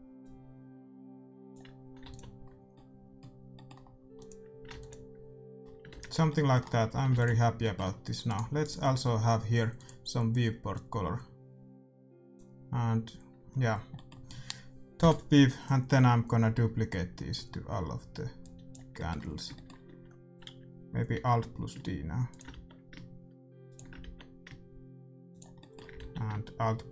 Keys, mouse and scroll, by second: 2.0 ctrl+s, 2.7 middle click, 4.2-6.0 drag, 4.7 ctrl+s, 6.0 shift+z, 6.9 a, 7.1 ctrl+s, 7.4-9.7 middle drag, 8.3-10.5 right drag, 9.7-11.6 drag, 13.6-15.1 middle drag, 14.9 KP_7, 18.5-20.2 drag, 18.9-21.0 middle drag, 21.1 alt+d, 22.5 alt+d, 24.0 alt+d, 25.5 middle click, 25.9 alt+d.